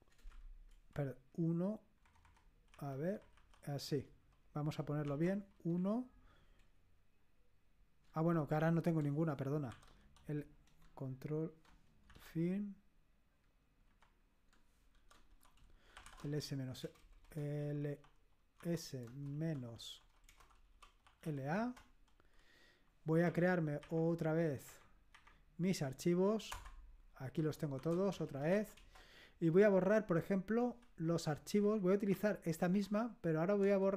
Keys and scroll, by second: 2.0 Left, 2.2 Left, 2.7 Delete, 3.1 Left, 3.3 Delete, 5.0 {, 5.7 Right, 9.7 ctrl+u, 12.1 ctrl+End, 13.8 End, 14.9 ctrl+u, 15.7-21.7 typing, 23.2 Up, 23.8 Up, 24.6 Up, 25.1 Up, 26.5 Return, 27.2-29.0 typing, 31.6 Up, 32.1 Up, 32.7 Home, 33.6-33.9 typing.